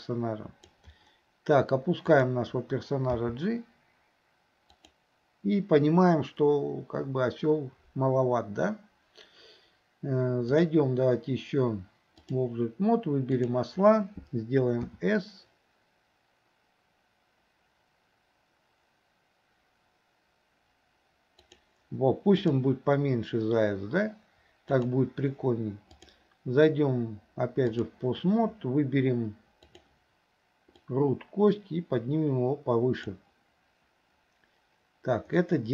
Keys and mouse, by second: 3.2 g, 10.6-12.5 drag, 13.4 click, 14.9 s, 22.6-23.4 drag, 26.0-28.0 drag, 29.7 click, 30.8-33.1 drag, 35.5-35.7 middle drag.